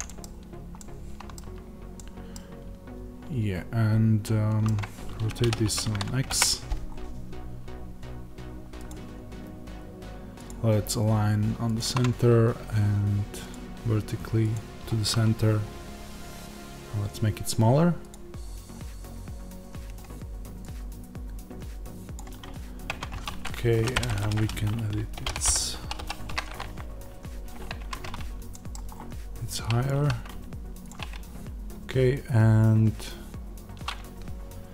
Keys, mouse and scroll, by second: 0.0-5.4 middle drag, 0.1 scroll, 1.5-1.9 scroll, 5.4 r, 6.8-11.7 scroll, 11.7-22.8 drag, 22.8 Tab, 23.7 BackSpace, 25.1 shift+h, 27.7 Tab, 28.4-29.8 middle drag, 28.8-29.8 scroll up 2, 29.8 s, 30.8-34.7 drag.